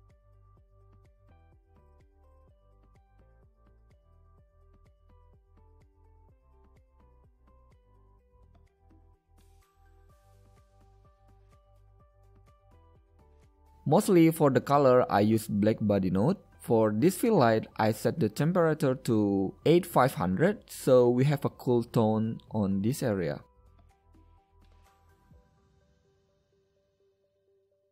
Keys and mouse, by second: 0.7 click, 1.6 KP_1, 4.8 g, 8.6-10.3 drag, 10.3 middle click, 11.5-13.4 drag, 13.4-15.3 middle drag, 19.7 KP_0, 24.2 middle click, 27.2 middle click, 27.6 middle click.